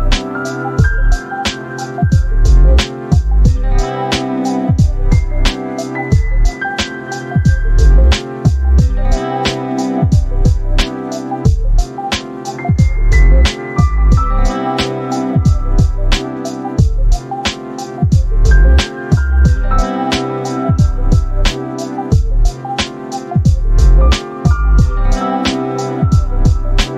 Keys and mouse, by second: 0.9 ctrl+z, 1.9 ctrl+z, 3.8 click, 4.8-6.3 ctrl+shift+drag, 7.2 click, 7.8 click, 8.4 space, 8.6 =, 9.1 space, 9.8 click, 10.8 -, 12.1 ctrl+shift+click, 16.0 -, 16.5 space, 17.0 click, 17.8 click, 19.3 click, 20.0 click, 20.5-22.7 drag, 23.5 click, 24.2 click, 25.3 click.